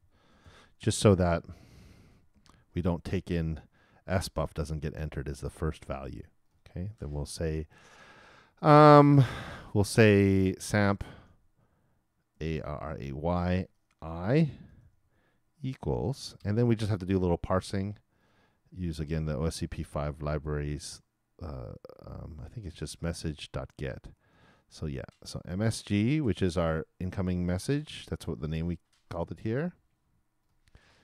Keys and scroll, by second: 0.3 shift+0, 1.7 shift+[, 2.0 shift+Return, 2.3 shift+Return, 2.5 shift+].